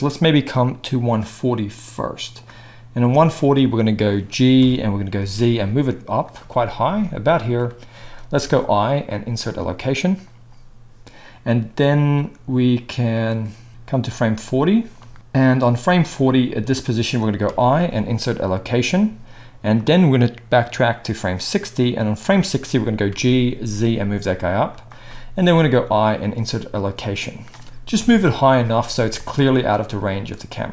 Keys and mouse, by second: 5.2 g, 6.2-12.2 middle drag, 12.2-24.8 drag, 13.7 ctrl+z, 17.4 i, 23.1 g, 24.8-30.7 middle drag, 25.6 i, 27.9 KP_0.